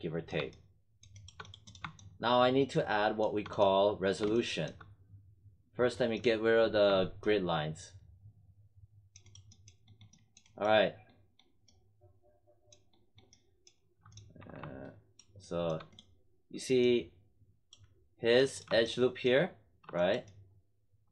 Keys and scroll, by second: 14.3 1.